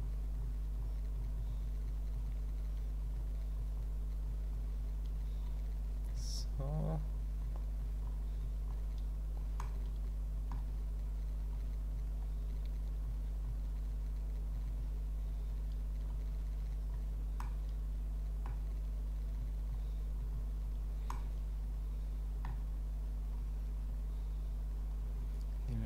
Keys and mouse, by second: 0.7 click, 1.2 click, 1.6 click, 2.1 click, 3.0 click, 3.5 click, 4.2 click, 5.5 click, 6.4 click, 7.1 click, 7.8 click, 8.4 click, 9.6 middle click, 11.5 click, 13.1 click, 14.5 click, 16.1 click, 17.4-18.4 middle drag, 19.3 click, 20.2 click, 21.1-22.4 middle drag, 23.4 click, 25.2 click.